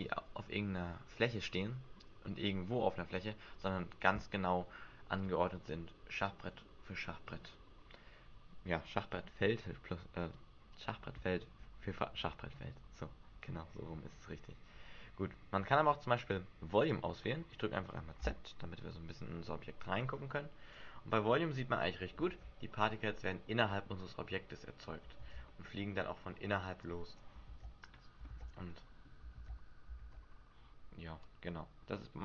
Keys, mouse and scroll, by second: 16.9 click, 18.1 z, 19.2-19.8 scroll down 4, 19.6-20.2 scroll up 2, 20.8 click, 21.7 middle click, 22.2 alt+a, 23.0 middle click, 25.2 alt+a, 25.4 middle click, 26.8 click, 27.4 alt+a, 28.3 alt+a, 28.7 middle click, 29.3 alt+a, 30.0 alt+a, 31.2 click.